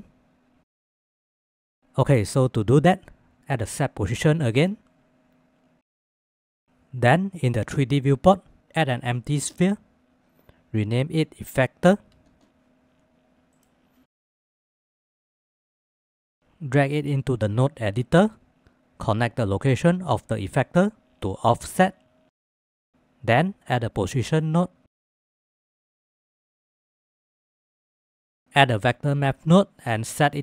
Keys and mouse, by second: 2.9 click, 3.6 click, 4.2 shift+a, 7.2 shift+a, 11.9-13.3 drag, 11.9 f, 14.1-16.2 middle drag, 16.2 drag, 16.5 g, 17.9-18.7 drag, 19.1-21.1 drag, 22.1-23.5 middle drag, 23.7 shift+a, 27.1 click, 28.5 shift+a.